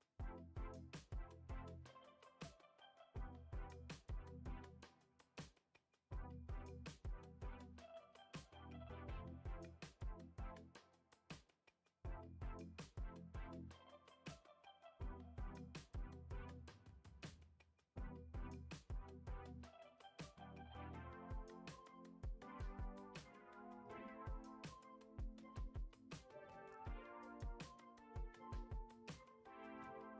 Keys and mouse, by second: 0.4 e, 2.3 g, 3.7 f, 4.1-4.6 middle drag, 4.8 Tab, 5.7 KP_1, 6.8 shift+a, 8.5 s, 9.1 g, 10.7 middle click, 10.9 g, 12.5 KP_1, 13.4 s, 15.5 r, 17.5 s, 19.0-19.4 middle drag, 19.5 g, 20.8 KP_1, 21.8 g, 22.7 r, 24.1 g, 25.0 g, 27.1 click, 28.0 click.